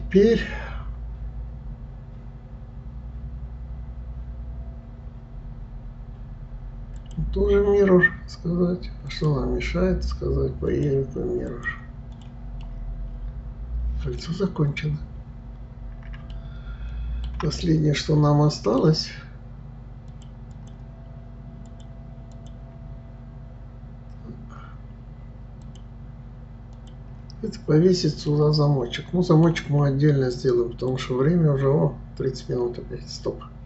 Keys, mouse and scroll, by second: 7.0-10.0 drag, 10.7 click, 11.5 click, 12.2 click, 12.7-14.5 middle drag, 14.5-15.3 scroll down 2, 15.3-16.3 scroll up 3, 16.3-20.1 shift+middle drag, 20.1 click, 20.5 click, 21.7 click, 22.3 click, 25.6 click, 26.8 click, 28.3-31.3 middle drag.